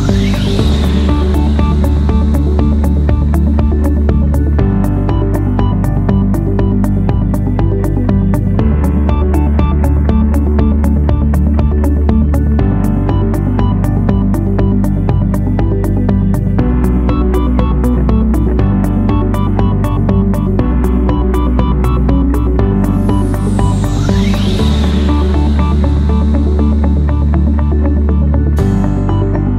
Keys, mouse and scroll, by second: 25.6 3, 26.3 Return, 29.2 2.